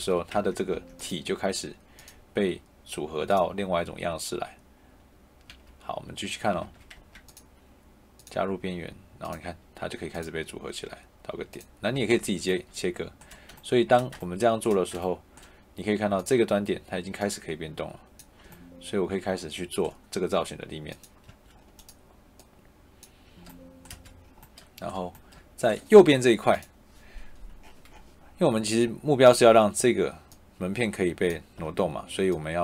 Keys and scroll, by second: 0.2 Tab, 5.4 Escape, 6.8 Tab, 11.8 Escape, 21.2 Escape, 23.8 Escape.